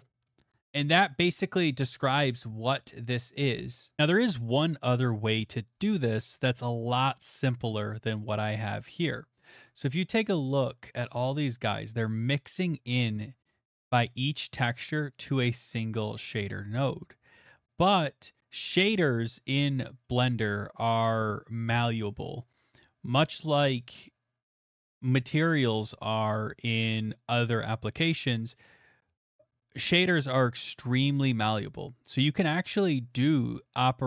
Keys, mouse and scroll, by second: 0.3 click, 0.5 scroll, 1.3 scroll.